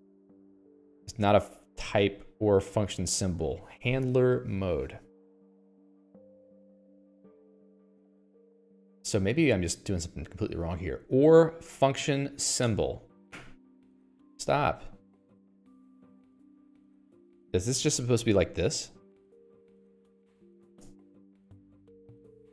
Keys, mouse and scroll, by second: 13.7 0, 14.3 Escape, 14.5 Escape, 14.7-22.4 typing, 15.5 Escape, 17.6 Escape, 21.3 Escape.